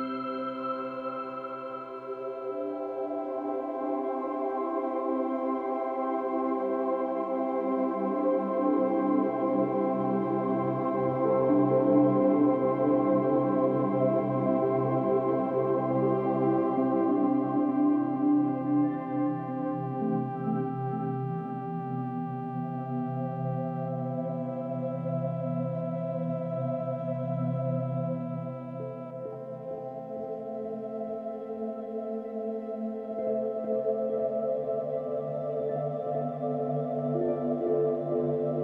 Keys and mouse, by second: 3.3 click, 4.7 ctrl+click, 5.9 click, 6.2 drag, 8.6 click, 9.8-11.4 ctrl+shift+drag, 12.3 click, 12.4 drag, 14.7 click, 17.2 click, 18.6 drag, 19.4-28.0 drag, 28.0-28.8 typing, 32.1 space, 35.0 ctrl+s, 35.9-38.2 drag.